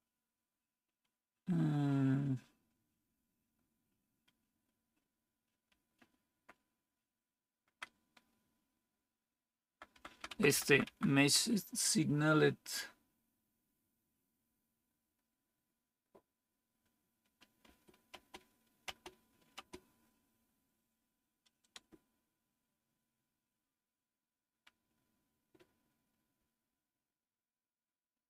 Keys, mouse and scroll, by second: 5.6 Up, 6.2-7.7 Up, 9.5 Down, 9.8 Down, 10.0 Down, 10.2 Down, 10.4 Down, 10.5 Down, 10.7 Down, 17.5 space, 18.0 space, 18.7 space, 19.4 space, 21.6 Return.